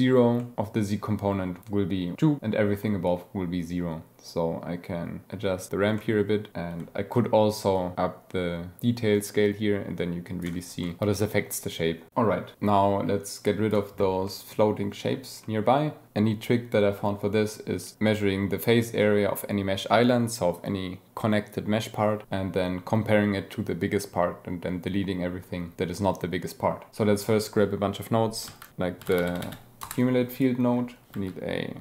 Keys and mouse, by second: 0.4 click, 3.1-5.2 drag, 6.0-6.5 drag, 7.7-10.4 shift+drag, 10.8-11.4 drag, 12.5 click, 13.3 click, 14.3 drag, 15.4 click, 28.5 shift+a, 29.0 BackSpace, 29.4 c, 30.8 click, 31.3 shift+a.